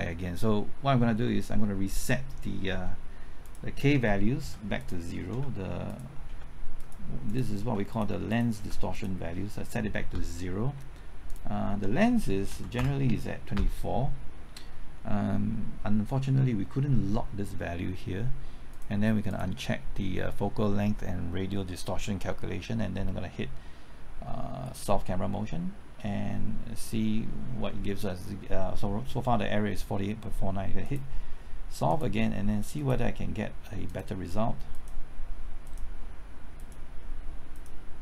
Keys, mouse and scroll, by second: 1.2 middle click, 3.4 click, 4.4 KP_0, 4.8 click, 5.3 KP_0, 5.9 click, 6.3 KP_0, 6.8 click, 7.6 KP_0, 7.9 click, 8.6 KP_0, 8.9 click, 12.3 KP_2, 12.5 KP_4, 12.7 Return, 19.3-38.0 drag, 34.7 KP_Enter.